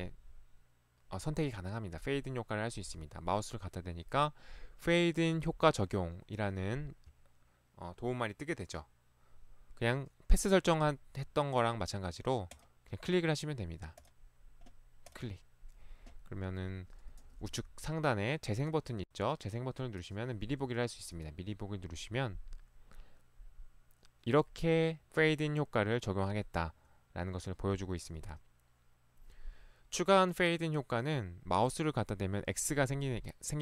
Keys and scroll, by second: 17.5 ctrl+1, 20.5 ctrl+Escape.